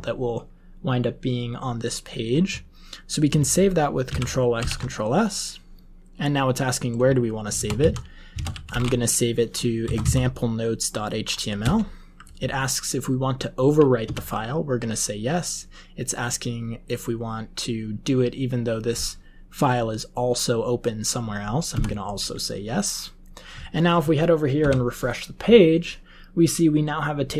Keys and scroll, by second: 4.0 ctrl+x, 4.5 ctrl+s, 7.4-9.2 typing, 9.8 Down, 9.9 Down, 11.5 Return, 14.0 y, 21.7 y, 24.6 F5.